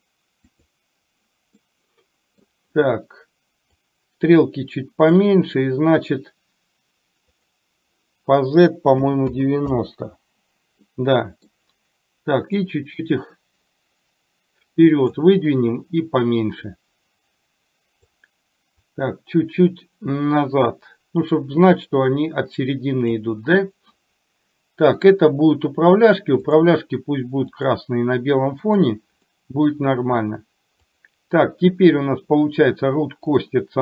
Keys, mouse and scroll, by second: 0.5 click, 1.6-2.5 scroll up 1, 2.5-3.7 scroll down 1, 3.7-5.2 drag, 7.4-9.9 drag, 11.0 middle click, 12.6-15.1 drag, 25.1 click, 26.6-27.7 drag, 29.4 middle click, 31.0 click, 33.5-33.8 drag.